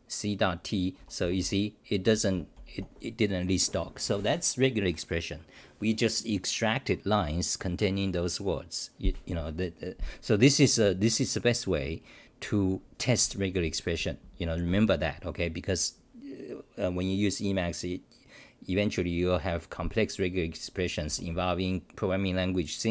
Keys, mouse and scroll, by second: 0.7-3.2 typing, 21.1 c, 21.3 c.